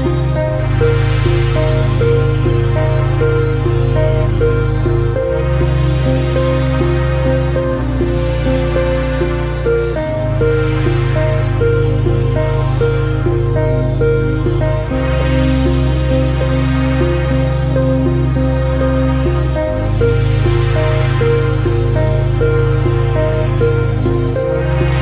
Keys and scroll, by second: 3.2 ctrl+r, 4.2 ctrl+space, 8.6 ctrl+space, 11.2 ctrl+space, 12.2 ctrl+alt+space, 19.2 ctrl+space, 20.8 ctrl+alt+space, 21.3 ctrl+alt+space, 22.4 ctrl+space, 23.3 ctrl+space.